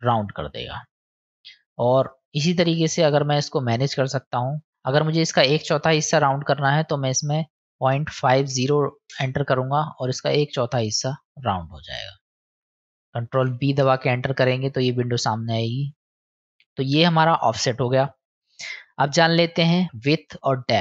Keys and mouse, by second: 0.1 middle click, 1.4-3.2 drag, 4.1-9.8 drag, 10.3 click, 11.1 middle click, 16.9-20.8 drag.